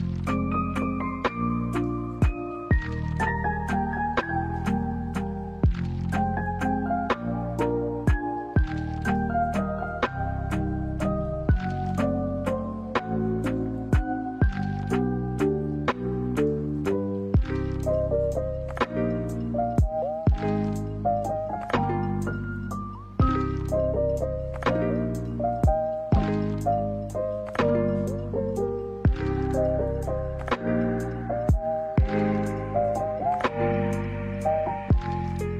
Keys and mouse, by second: 0.2 middle click, 0.9 shift+middle click, 1.5 middle click, 2.5 middle click, 4.6 alt+right click, 5.3 middle click, 5.9 shift+middle click, 6.9 e, 7.6 s, 12.5 middle click, 12.7 a, 12.9 a, 13.2 shift+middle click, 13.5 middle click, 14.2 middle click, 14.9-15.4 drag, 15.7 middle click, 16.4 a, 16.5 a, 16.9 shift+middle drag, 17.2 middle click, 18.1 e, 18.8 s, 21.5 shift+middle click, 21.9 middle click, 24.0 a, 24.1 a, 24.5 middle click, 25.5 middle click, 26.2 shift+middle click, 27.0 middle click, 27.8 alt+right click, 28.1 alt+right click, 29.7 shift+middle drag, 32.2 click, 33.1 click, 34.0 middle drag.